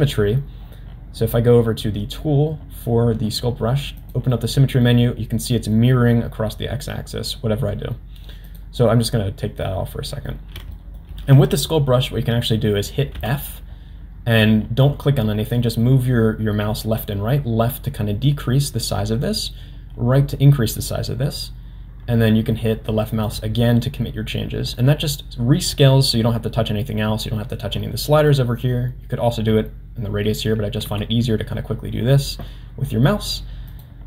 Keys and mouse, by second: 4.0 click, 8.5 click, 9.6 middle click, 10.7 shift+middle click, 13.1 f, 30.9 f.